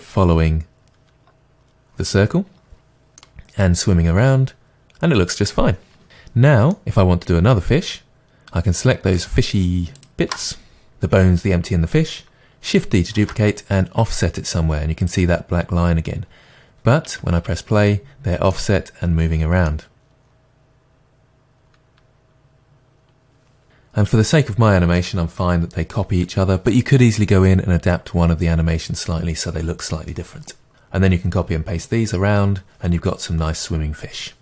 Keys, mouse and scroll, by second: 3.3-5.9 middle drag, 6.0 space, 6.8 middle click, 9.2 shift+click, 13.2 shift+d, 15.6 click, 17.2 space, 18.6-34.4 middle drag.